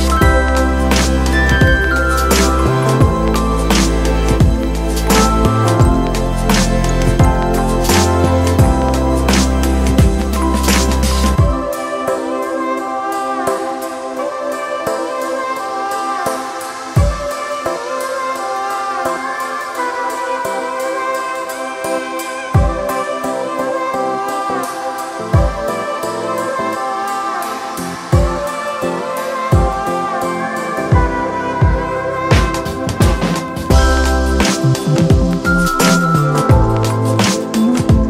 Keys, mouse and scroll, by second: 12.7 ctrl+0, 22.5 ctrl+=, 26.6 alt+click, 30.9 alt+click, 36.9 alt+click.